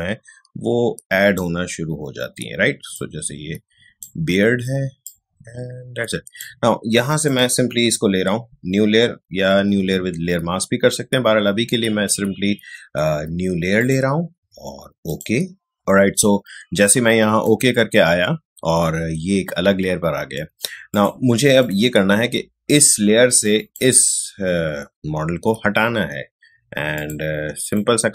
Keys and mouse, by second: 4.8 space, 5.0 click, 5.3 space, 7.2 click, 13.7 click, 16.6 space, 16.8 click, 17.1 space, 20.9 click, 26.9 click.